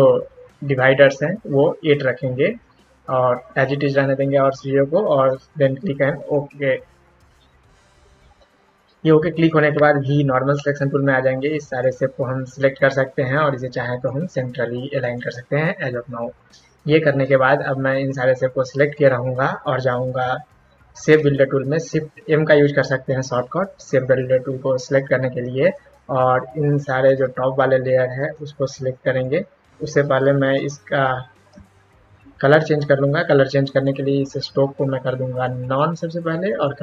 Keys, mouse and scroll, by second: 6.3 click, 10.1 v, 10.9 click, 13.9 click, 15.0 click, 18.1 click, 21.9 shift+m, 25.7-29.2 drag, 30.5 ctrl+x, 31.5 ctrl+z, 32.1 ctrl+z, 33.7 click, 35.4 click, 36.1 click, 36.5 double click.